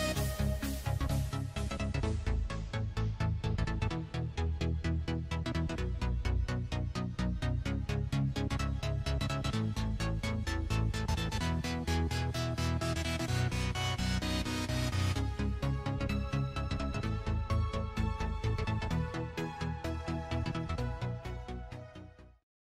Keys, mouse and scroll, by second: 2.9 click, 5.2 click, 7.1 click, 7.9 click, 10.1 middle click.